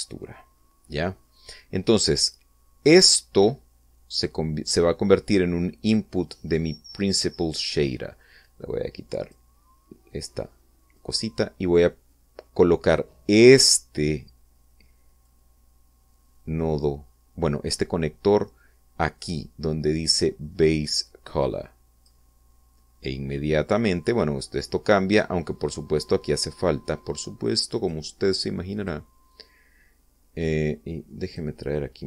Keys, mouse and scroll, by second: 1.5-2.3 middle drag, 2.9-5.0 drag, 9.0 click, 11.6-14.5 drag, 15.9-22.9 drag, 24.1 scroll up 1, 24.3-25.0 scroll down 2, 25.2-27.1 middle drag, 28.4 click, 29.3 click, 31.9 click.